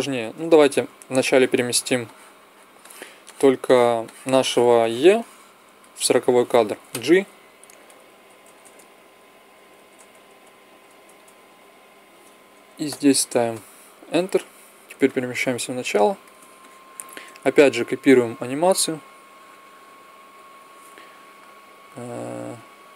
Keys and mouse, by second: 0.0 shift+space, 1.1-8.5 drag, 6.8 g, 14.8-16.2 drag, 16.4 middle click, 17.1-20.6 middle drag, 17.7 b, 22.3-22.9 drag.